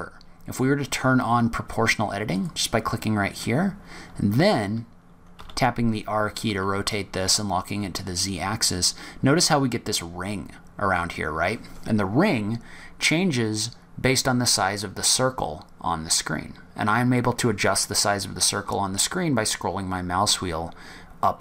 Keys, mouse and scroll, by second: 2.3 click, 5.3 r.